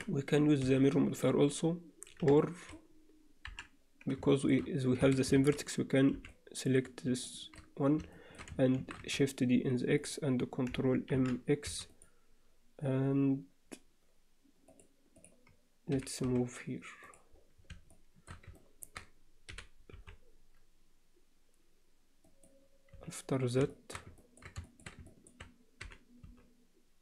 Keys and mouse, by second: 0.6 z, 2.4 middle click, 3.5 KP_7, 4.3 shift+middle click, 5.0 a, 6.1 b, 7.2 shift+middle click, 8.1 alt+shift+middle click, 8.8 shift+d, 11.1 ctrl+m, 14.7 click, 15.9 g, 17.9 shift+middle click, 18.5 ctrl+alt+middle click, 22.9 z, 23.7 alt+shift+middle click, 24.2 ctrl+middle click, 24.7 alt+shift+middle click, 25.1 ctrl+alt+middle click, 25.8 g.